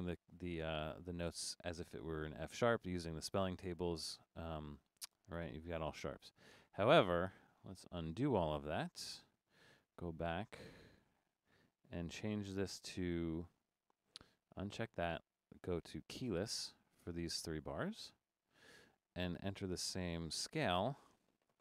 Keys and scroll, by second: 6.8 Escape, 8.1 BackSpace.